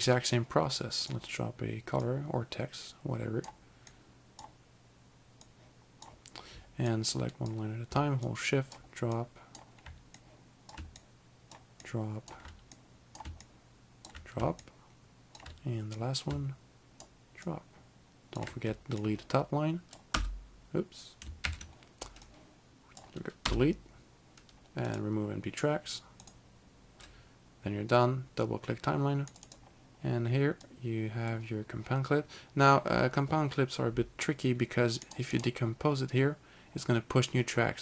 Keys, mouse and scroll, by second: 1.1 click, 2.2 click, 4.0 click, 5.5 click, 7.0 click, 8.3 shift+click, 9.3 shift+click, 10.3 click, 11.1 shift+click, 11.9 shift+click, 12.9 click, 13.5 shift+click, 14.7 shift+click, 16.1 click, 17.6 shift+click, 19.1 click, 20.2 Delete, 21.5 ctrl+z, 22.4 click, 23.5 Delete, 24.9 right click, 26.3 click, 29.4 click, 29.5 double click, 30.7 click, 35.1 click, 35.4 double right click.